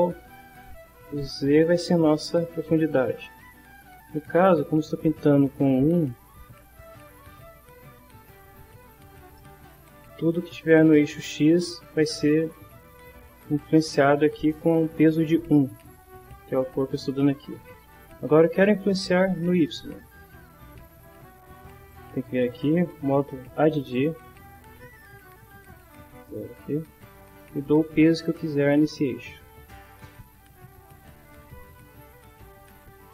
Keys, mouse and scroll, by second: 4.4-7.6 drag, 9.3 middle click, 15.8 click, 21.9 click, 23.9 click, 25.0 click, 25.8 click, 28.6-31.5 drag, 32.3-33.1 drag.